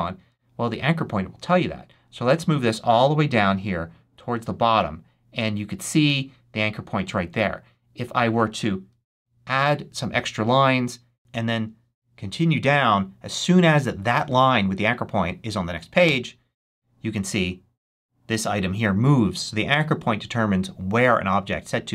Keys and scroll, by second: 9.0 Return, 12.0 Return, 15.9 Return.